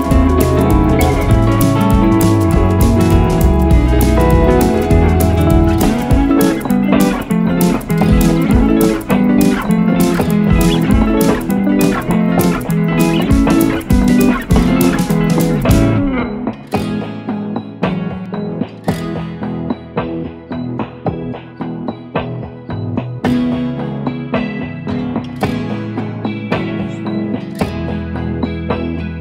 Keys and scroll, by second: 5.6 space, 6.2 ctrl+Page_Down, 7.7 Escape, 11.6 F3, 14.0 F3, 14.4 F2, 19.7 ctrl+r, 20.2 F3, 26.7 F2.